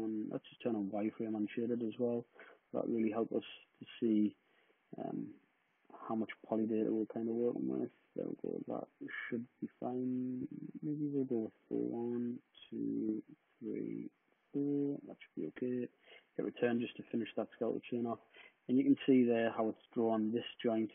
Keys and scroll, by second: 3.0 super+z, 10.0 super+z, 10.4 super+z, 15.5 Return, 16.6 space.